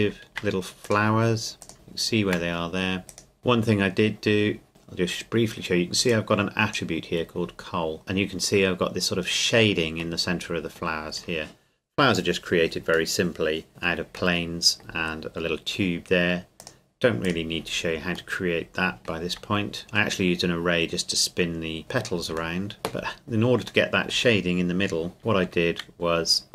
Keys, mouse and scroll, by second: 0.3 shift+click, 0.8 click, 1.7 shift+middle click, 3.1 right click, 3.4-3.8 scroll up 1, 6.1 click, 8.7-10.2 scroll up 1, 10.2 middle click, 13.1 middle click, 13.7-14.3 scroll down 1, 14.4 middle click, 16.6 click, 18.4 middle click, 19.4 Tab, 19.8-21.2 scroll down 1, 22.6 shift+middle click, 23.9 middle click, 25.4 Tab.